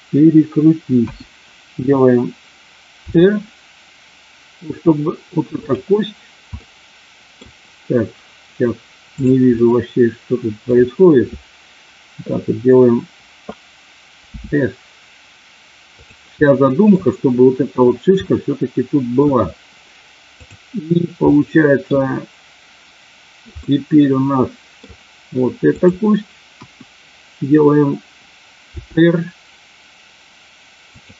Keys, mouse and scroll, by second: 0.9 KP_1, 3.0 r, 5.5 click, 6.5 middle click, 9.5-10.7 middle drag, 14.2 s, 15.9 click, 16.4 middle click, 18.3 middle click, 20.4 click, 21.2 middle click, 23.7-24.9 middle drag, 26.6 KP_1, 28.8 r, 30.9 click.